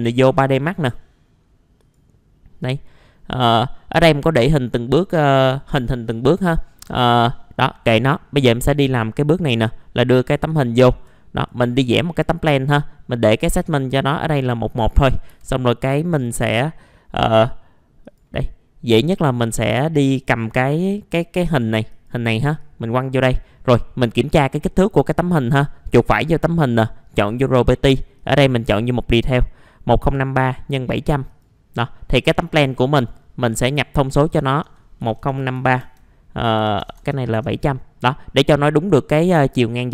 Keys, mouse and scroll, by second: 3.0 middle click, 3.6 scroll down 1, 3.9-8.6 middle drag, 10.5 ctrl+right click, 11.4-13.1 drag, 13.5 right click, 14.9 middle click, 15.3 F4, 15.6-16.0 scroll up 1, 16.0 middle click, 18.0-19.1 drag, 19.3 middle click, 20.4 click, 25.0 right click, 26.7 click, 35.0 KP_1, 35.2 KP_0, 35.4 KP_5, 35.5 KP_3, 35.8 Tab, 36.6 KP_7, 36.8 KP_0, 38.1 middle click.